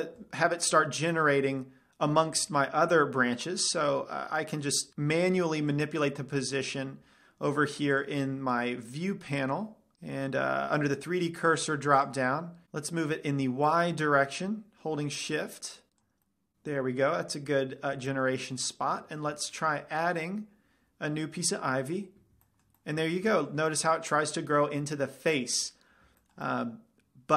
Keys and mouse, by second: 4.9-6.8 drag, 8.4-13.4 drag, 14.2-16.1 drag, 16.4-18.1 middle drag, 18.6-18.9 middle drag, 20.2 shift+a, 22.9-23.5 middle drag, 25.7 middle click, 26.8-27.3 middle drag.